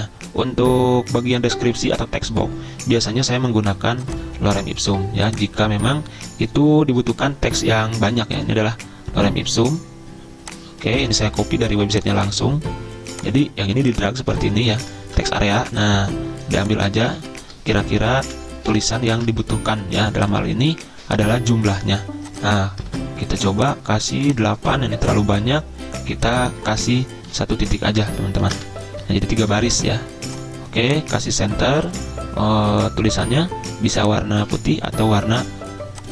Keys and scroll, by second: 3.2 super+m, 11.1 ctrl+c, 15.0 ctrl+v, 17.2 ctrl+shift+Up, 18.0 ctrl+x, 18.2 ctrl+a, 18.7 Delete, 19.2 ctrl+v, 22.9 ctrl+a, 28.3 ctrl+shift+Down, 28.6 Delete, 29.4 ctrl+a.